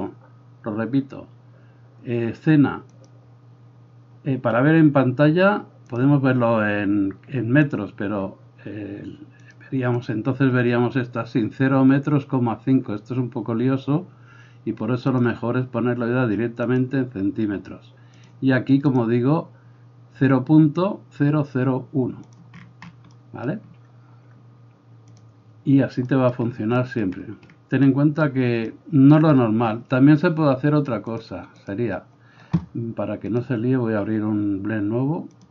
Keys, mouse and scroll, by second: 0.0-3.1 drag, 3.1-6.0 middle drag, 6.0-22.3 drag, 22.3-25.1 middle drag, 25.1-26.1 drag, 26.1-31.2 middle drag, 31.2-35.5 drag.